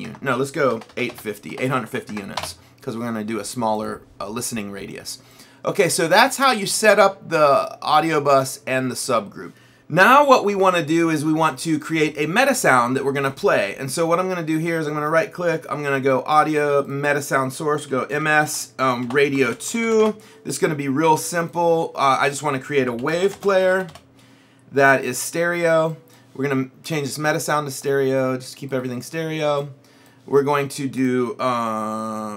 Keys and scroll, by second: 0.8 BackSpace, 1.7 KP_8, 1.9 KP_5, 2.2 KP_0, 2.4 Return, 17.7-20.4 typing, 22.6-24.4 typing.